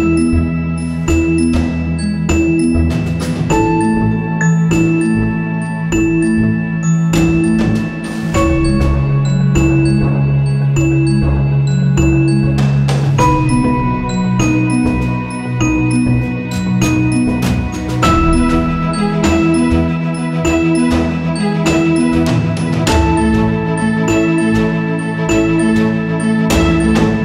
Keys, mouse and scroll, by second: 0.0 right click, 0.7 click, 1.6 click, 3.5-7.6 drag, 9.5 click, 13.8 click, 19.7 right click, 20.5-23.2 drag, 23.2 ctrl+c, 23.5 ctrl+f, 25.2 click, 26.5-27.2 drag.